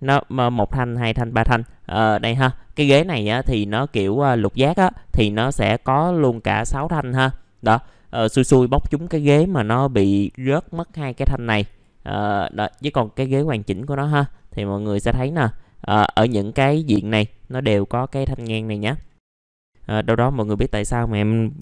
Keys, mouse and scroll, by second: 12.5 click, 13.7-14.2 scroll up 1, 14.6 click, 19.1-20.4 scroll down 1, 20.4 click.